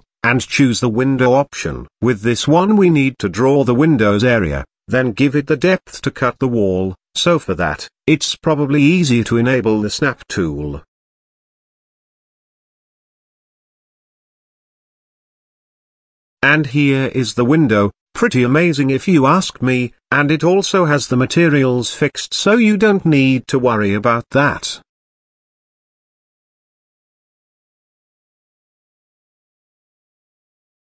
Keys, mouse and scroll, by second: 6.5 click, 7.2-9.3 drag, 10.5 click, 15.7 Tab, 16.2-16.6 scroll up 4, 16.6-18.7 shift+middle drag, 20.6 click, 24.8-27.1 scroll down 3, 28.0-29.1 scroll up 3, 29.1 scroll down 2, 30.0 Tab, 30.4-30.8 middle drag.